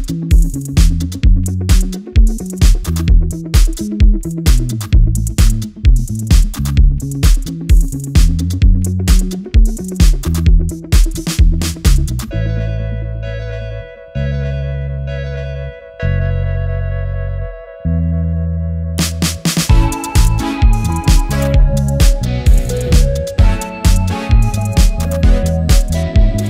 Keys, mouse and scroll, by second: 3.1 Return, 7.0-14.8 drag, 8.5 typing, 11.0-11.7 typing, 14.8 Return, 15.8-21.6 drag, 21.9 alt+scroll down 1, 22.1-22.5 alt+scroll up 1, 22.8 alt+scroll down 1, 23.1 alt+scroll up 1, 24.3 click.